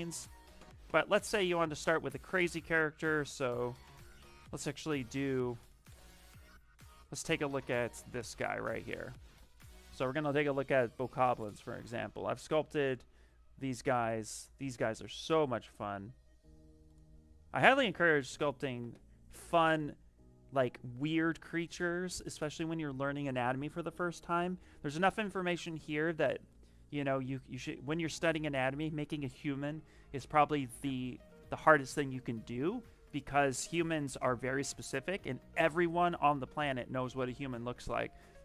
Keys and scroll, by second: 2.9-4.6 typing.